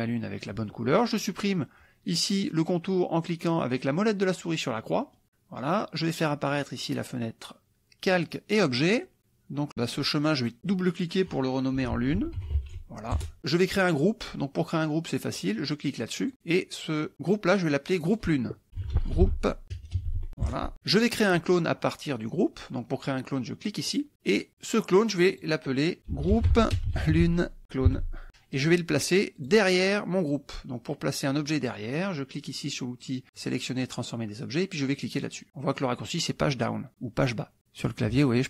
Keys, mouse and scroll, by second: 5.0 click, 6.6 click, 8.4 click, 10.2 click, 11.8 l, 12.2 u, 12.5 e, 13.2 Return, 16.2 click, 18.0 click, 18.8-20.3 typing, 20.4 Return, 23.9 click, 25.2 click, 26.1-27.6 typing, 28.2 Return, 29.4 click, 33.3 click, 38.1 Page_Down.